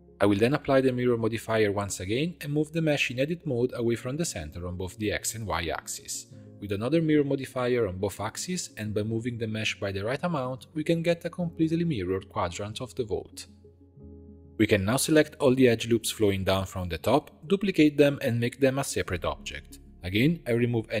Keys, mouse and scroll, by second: 1.2 ctrl+a, 1.7 scroll up 2, 1.8 g, 3.9 g, 5.6 Tab, 6.8-9.5 drag, 10.2 click, 10.5 g, 14.5 alt+shift+click, 15.1 alt+shift+click, 15.5 alt+shift+click, 15.8 alt+shift+click, 16.0 middle click, 16.5 alt+shift+click, 16.9 alt+shift+click, 17.2 alt+shift+click, 17.4 scroll down 2, 17.7 shift+d, 18.6 p, 19.5 Tab, 20.1 click.